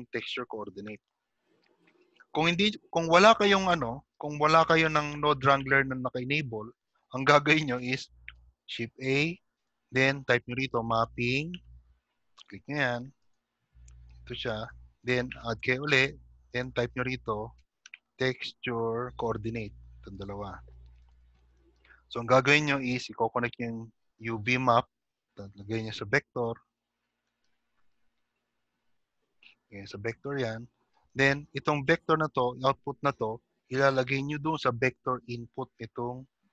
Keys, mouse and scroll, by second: 3.5 click, 3.5 scroll down 1, 5.5 middle click, 5.5 click, 5.5-6.3 scroll down 2, 7.8 shift+middle click, 7.8-9.6 scroll down 1, 7.8 g, 10.2 click, 10.2 shift+a, 15.8 click, 25.5 middle click, 25.5 click, 25.5-25.8 scroll up 7, 26.8-27.5 scroll down 2, 27.8 middle click, 27.8 scroll down 1, 29.5 click, 33.6 shift+middle click.